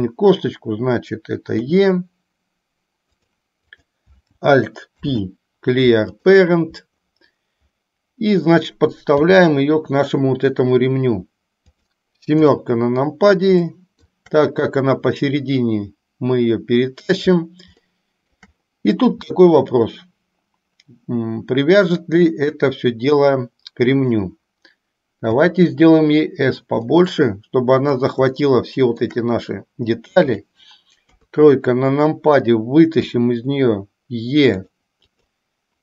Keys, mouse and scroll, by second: 1.7 e, 3.8 click, 5.2 alt+p, 9.2 g, 12.4 KP_7, 13.7 middle click, 15.3-17.2 drag, 18.1 shift+middle click, 25.4 s, 26.9-28.1 middle drag, 28.6 shift+middle click, 30.6 click, 31.2 KP_3, 33.2 e.